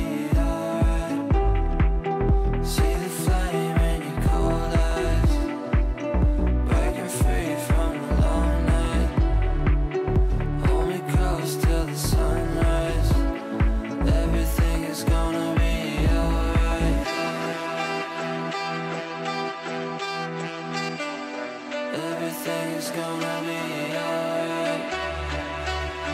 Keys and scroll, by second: 16.7 Delete, 18.0 ctrl+z, 19.5 Delete, 23.1 Delete.